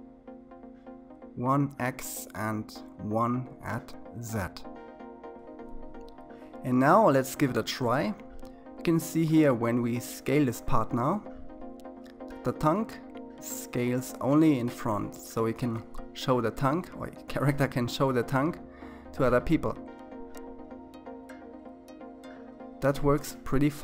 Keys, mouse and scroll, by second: 7.7 s, 11.7 s, 19.8-21.3 middle drag, 21.3-23.2 scroll down 2, 23.4 s.